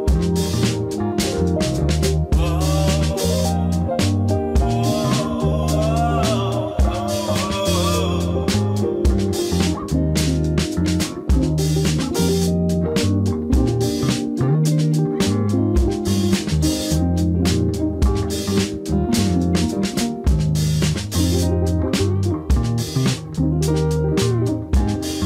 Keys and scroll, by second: 0.0-1.5 typing, 3.5 z, 5.0 s, 8.8 shift+a, 10.6 Tab, 11.2 ctrl+s, 12.0 KP_1, 13.4 m, 14.0 g, 18.9 e, 20.0 e, 21.3 e, 22.4-25.2 typing.